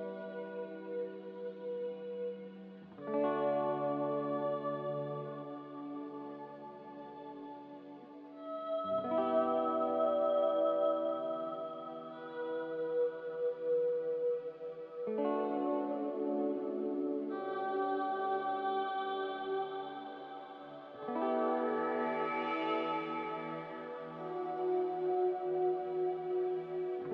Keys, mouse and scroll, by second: 12.8 ctrl+c, 13.4 ctrl+r.